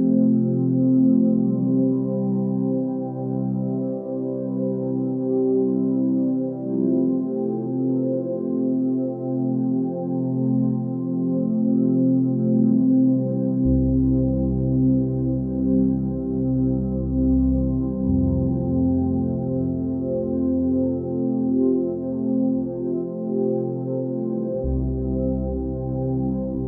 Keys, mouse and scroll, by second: 0.1 click, 0.5-2.2 middle drag, 2.2 2, 2.5 click, 3.5 shift+click, 4.4 KP_1, 6.8 ctrl+b, 23.5 click, 24.0 scroll up 2, 25.1-25.4 scroll down 2, 25.9-26.3 scroll up 2.